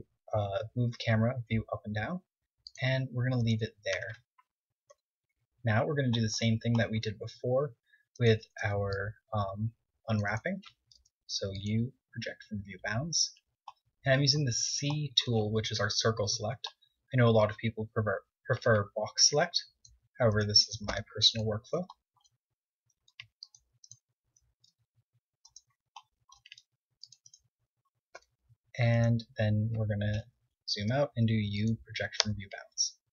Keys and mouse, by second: 3.1-4.3 right drag, 4.3 Tab, 5.2 KP_1, 7.3 KP_1, 8.1 c, 8.6 a, 8.9 c, 11.2 u, 13.4 a, 16.2 KP_7, 18.8 c, 19.7 middle click, 20.6 click, 21.1 u, 22.6-24.3 middle drag, 23.3 c, 24.8 c, 25.7-28.3 middle drag, 26.8 c, 28.3 e, 30.9 u, 32.3 Tab.